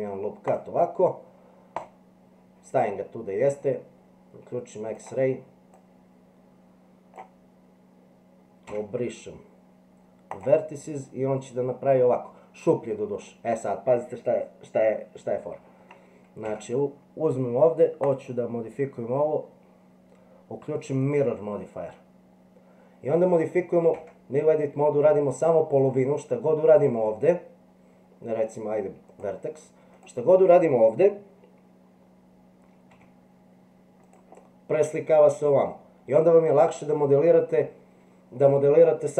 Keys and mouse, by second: 5.8-7.2 drag, 8.7 x, 11.4 middle click, 13.3-15.9 middle drag, 16.5 Tab, 18.0-21.1 drag, 24.0 Tab, 26.8 click, 29.1 click, 30.0 click, 32.9 g.